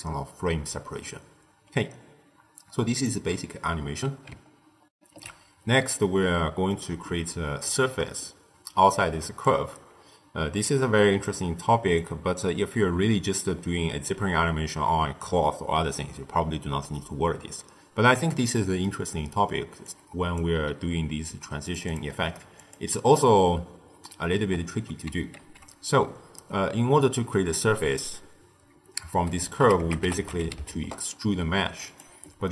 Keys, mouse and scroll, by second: 4.9 ctrl+alt+shift+q, 5.9-9.1 middle drag, 9.1 d, 9.3-11.2 drag, 11.2-11.8 d, 11.9-13.9 drag, 13.9 d, 16.2 d, 18.7-19.8 middle drag, 19.8 click, 21.2 g, 21.8 click, 22.5 click, 23.4-25.3 middle drag, 25.3 ctrl+a, 32.4-32.5 middle drag.